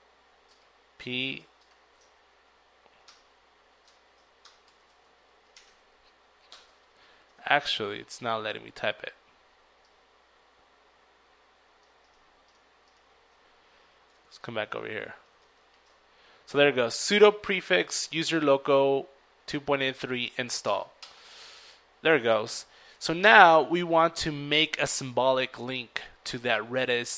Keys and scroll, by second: 4.9 typing, 13.4 ctrl+v, 18.7 ctrl+Return, 18.7 $, 19.9 ctrl+c, 20.4 ctrl+l, 20.6 ctrl+a, 20.7 ctrl+r, 20.8 ctrl+Return.